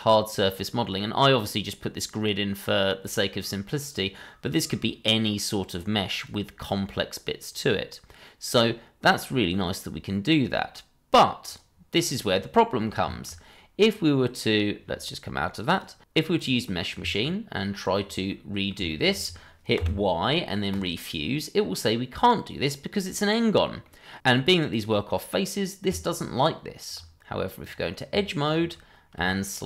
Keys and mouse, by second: 12.5 middle click, 13.1 shift+middle drag, 13.8 middle click, 15.7 click, 16.6 click, 17.0 Tab, 17.7 click, 18.5 ctrl+click, 18.8 middle click, 19.2 shift+middle click, 19.7 y, 23.8-24.1 middle drag, 24.9-25.4 middle drag, 25.8 Tab, 27.6 click, 28.4 ctrl+click, 29.5 shift+click.